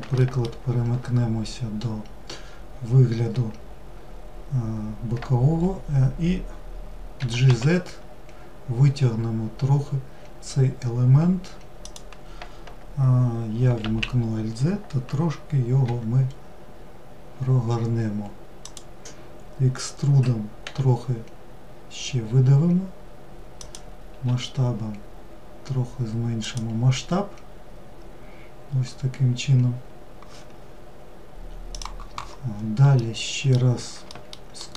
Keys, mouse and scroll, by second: 31.8-32.9 middle drag, 34.6-34.7 shift+middle drag.